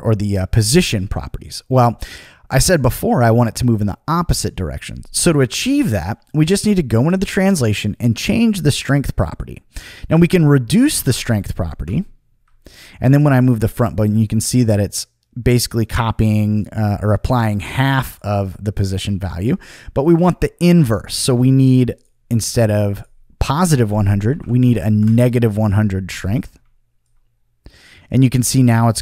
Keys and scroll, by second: 10.6-11.4 typing, 19.0 super+z, 24.1-25.1 typing.